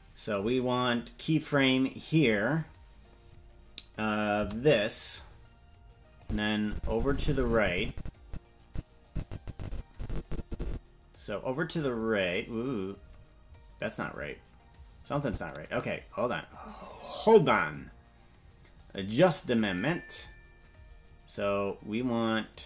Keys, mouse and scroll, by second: 4.4 i, 6.1-11.7 drag, 15.0 click, 16.8-20.2 drag.